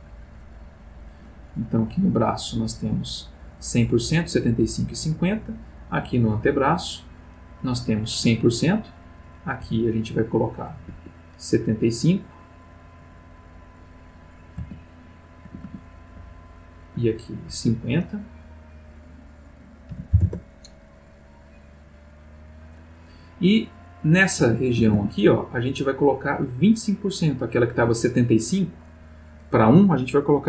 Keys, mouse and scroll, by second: 0.4 click, 1.9 click, 6.3 click, 9.6 c, 10.1 click, 10.9 Escape, 13.5 click, 14.6 a, 15.4 a, 16.1 c, 16.6 click, 17.6 Escape, 18.6 click, 19.9 ., 20.1 5, 20.2 Return, 21.8 click, 24.4 a, 25.2 c, 25.8-27.6 drag, 27.8 Escape, 28.9 click.